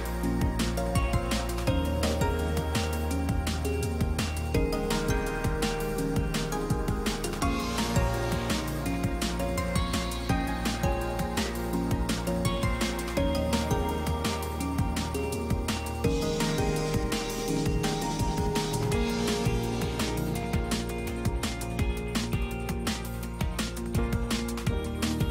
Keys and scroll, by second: 6.1 space, 7.3 alt+space.